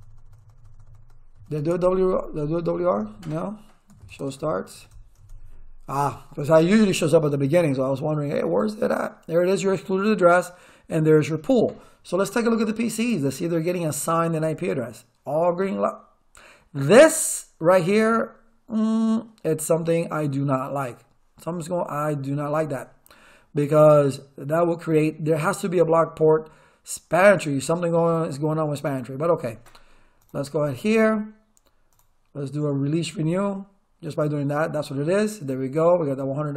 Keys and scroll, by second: 1.6-5.3 typing.